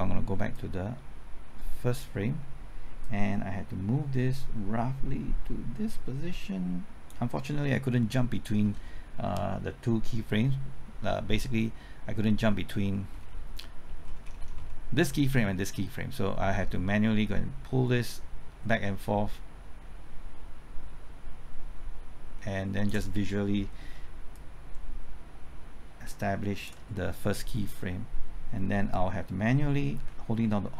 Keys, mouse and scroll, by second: 0.5-7.2 drag, 12.5 scroll up 1, 13.6 middle click, 14.0-14.4 scroll up 1, 16.1-23.2 drag, 24.3-26.6 shift+drag.